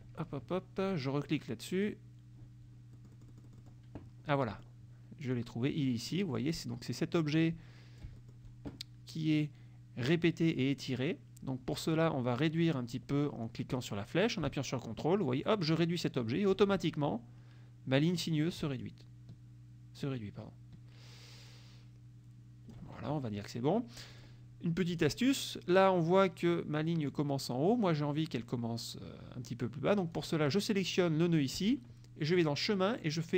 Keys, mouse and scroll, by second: 1.8 click, 3.0 middle click, 4.4 click, 5.4 click, 6.2 click, 7.4 click, 8.3 middle click, 14.6-16.8 ctrl+drag, 18.9-23.0 ctrl+drag, 24.2 click, 25.0 click, 30.2 click, 32.5 click.